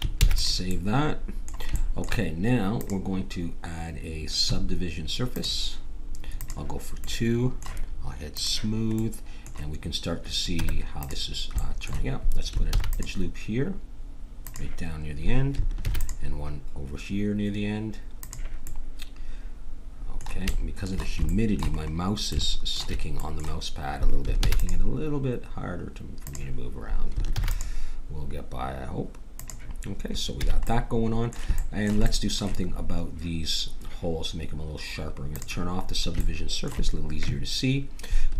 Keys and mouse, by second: 0.2 ctrl+s, 2.8-4.7 drag, 6.4-9.0 drag, 7.0 middle click, 7.9 middle click, 9.0-10.1 middle drag, 10.5 Tab, 12.7 ctrl+r, 15.8 ctrl+r, 24.4 ctrl+r, 27.3 ctrl+r, 30.4 a, 35.2 click, 35.8-37.1 middle drag.